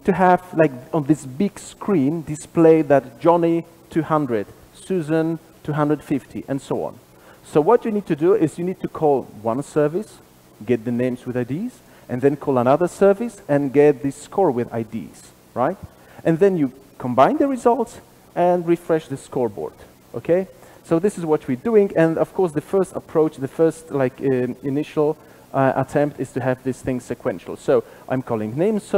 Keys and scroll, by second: 25.8 super+b.